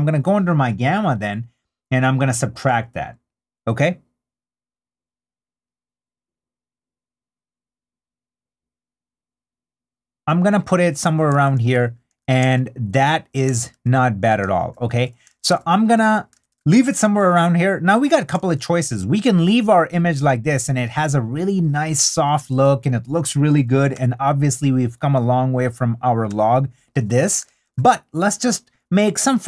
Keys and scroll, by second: 13.4 super+d, 18.4 super+d, 23.9 \, 27.5 super+d.